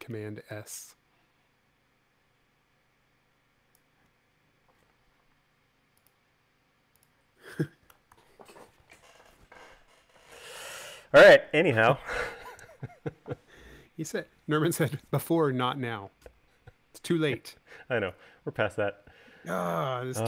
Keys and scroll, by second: 5.5 l, 8.6 super+s, 11.8 space.